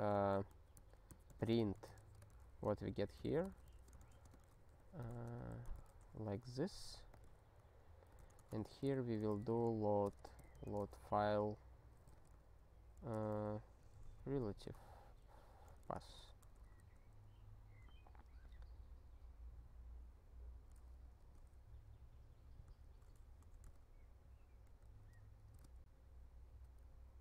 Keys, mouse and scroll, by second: 0.0 ctrl+g, 0.5 alt+b, 0.8 alt+d, 1.0-6.0 typing, 3.2 ctrl+b, 7.1 click, 7.6 ctrl+a, 8.1 Return, 8.2 ctrl+p, 8.4-12.3 typing, 13.3 ctrl+BackSpace, 13.5-16.3 typing, 16.7 ctrl+n, 16.7 ctrl+n, 20.9 ctrl+f, 21.2 ctrl+f, 22.8 ctrl+n, 23.7-24.8 ctrl+p, 25.5 ctrl+space, 25.6-26.5 ctrl+n, 26.8 ctrl+n.